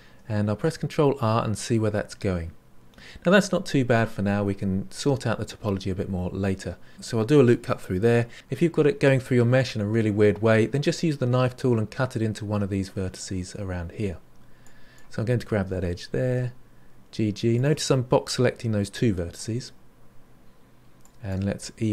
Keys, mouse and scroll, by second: 21.0 click.